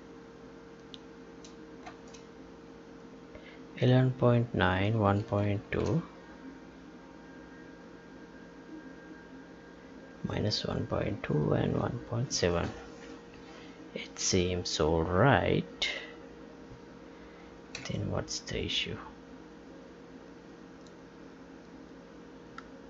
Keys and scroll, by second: 1.8 space, 17.9 Tab.